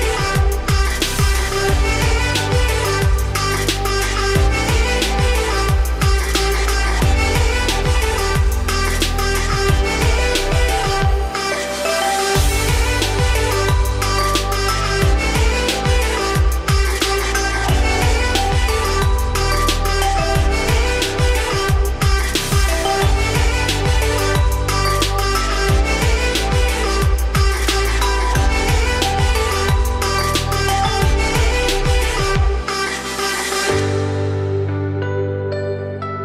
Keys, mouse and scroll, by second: 0.1 z, 0.4 scroll up 2, 0.7 3, 1.3-2.5 middle drag, 2.5 click, 2.7 middle click, 3.6 click, 3.9 3, 4.1 click, 4.5-6.0 middle drag, 6.0 ctrl+click, 6.4-9.5 middle drag, 9.6 middle click, 9.7-10.2 scroll up 2, 10.2-11.5 middle drag, 11.5 shift+click, 12.0 middle click, 12.9 ctrl+click, 13.4-15.1 middle drag, 15.1 ctrl+z, 15.8-16.9 middle drag, 16.9 ctrl+click, 17.4-18.4 middle drag, 18.4 ., 20.6 s, 23.1 g, 24.2 z, 24.3 scroll down 2, 24.4-26.0 middle drag, 26.0 g, 27.8-28.2 scroll down 7, 28.2 middle click, 29.0 scroll up 2, 29.3 scroll down 4, 29.4 middle click, 29.8 Tab, 29.9 scroll down 1, 30.0-31.8 middle drag, 31.8-32.2 scroll up 4, 32.2 scroll down 2, 32.3-33.2 middle drag, 33.2 `, 33.9 ctrl+s, 34.4-34.8 scroll down 3, 34.8 click, 35.1-36.1 scroll up 6, 36.1 click.